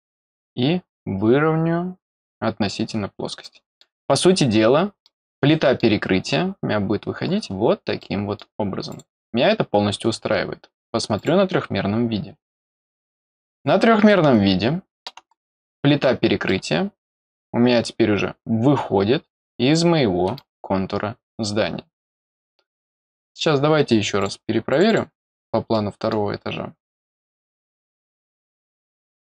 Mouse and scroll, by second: 2.0 click, 2.9 scroll down 2, 3.3 middle click, 4.0-4.4 scroll up 6, 4.9 middle click, 6.5 scroll up 1, 7.2-7.5 scroll down 2, 7.9 middle click, 8.8 click, 11.1 click, 12.0 scroll down 2, 13.4 click, 14.0 middle click, 15.8 scroll down 2, 15.9 scroll up 2, 16.4-20.3 middle drag, 24.1 click, 24.6 click, 24.8 click, 25.6 middle click, 26.8 click.